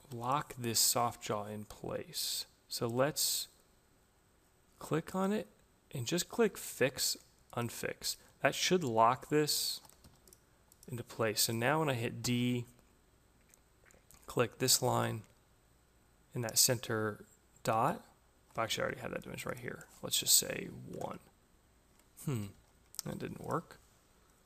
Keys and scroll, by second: 9.6 Escape, 12.1 d, 18.1 Escape, 20.8 Return, 22.3 ctrl+z, 22.9 Escape.